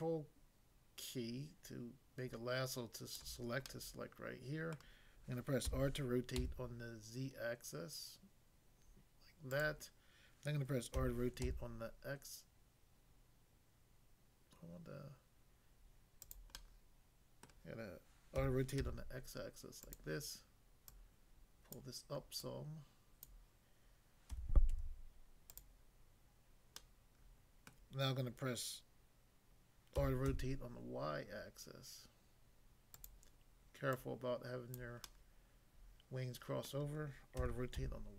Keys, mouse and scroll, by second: 3.6 middle click, 4.7 middle click, 5.7 r, 6.4 z, 9.6 click, 10.9-11.5 typing, 16.2 click, 16.5 middle click, 17.4 middle click, 18.4-18.8 typing, 19.8 click, 20.9 click, 21.8 click, 22.4 click, 23.3 click, 24.3-24.7 typing, 25.5 click, 26.8 middle click, 27.7 middle click, 29.9-30.3 typing, 33.0 click, 33.9 click, 34.8 click, 35.0 middle click, 36.7 middle click, 37.4-37.8 typing.